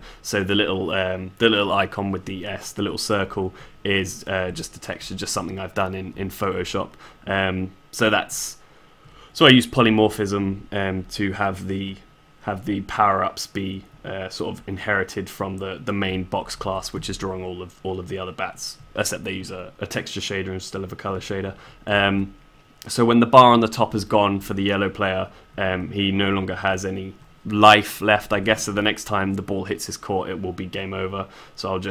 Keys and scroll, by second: 7.8 s.